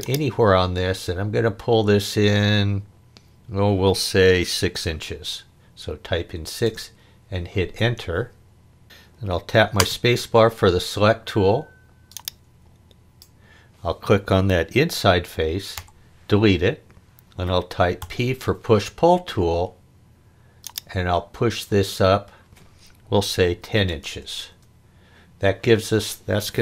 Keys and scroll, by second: 4.7 6, 6.6 Return, 9.8 space, 15.7 Delete, 18.0 p, 23.6 1, 23.9 0, 24.5 Return.